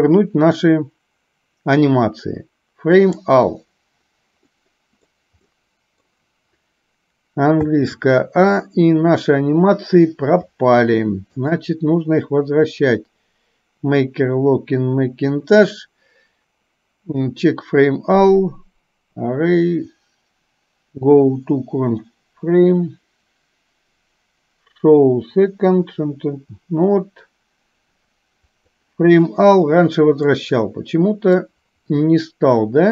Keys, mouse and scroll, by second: 4.6-5.1 middle drag, 5.6-6.1 middle drag, 7.7 a, 11.4-28.8 drag, 24.8-26.8 right drag, 30.4-31.4 middle drag.